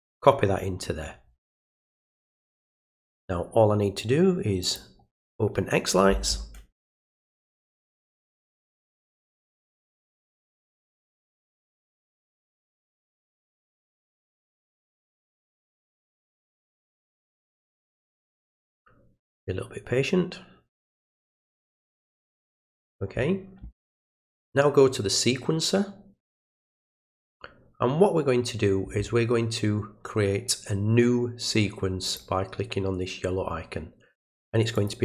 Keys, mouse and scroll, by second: 2.5 click, 4.7 click, 24.4 click, 32.1 click, 34.8 click.